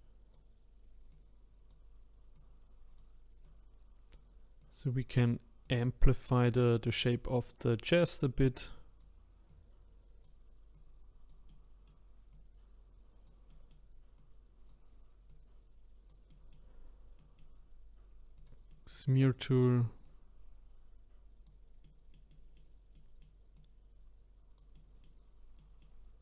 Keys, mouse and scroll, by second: 6.7-8.3 middle drag, 8.3-11.5 drag, 11.5 middle click, 12.3-13.5 drag, 13.5 middle click, 13.7-14.2 scroll up 1, 14.2-16.3 drag, 16.3 middle click, 16.8-17.2 scroll down 1, 17.2-18.3 middle drag, 18.3 click, 18.7-20.0 middle drag, 20.0-21.8 drag, 21.8-23.5 middle drag, 23.5-24.7 drag, 24.7-26.2 middle drag.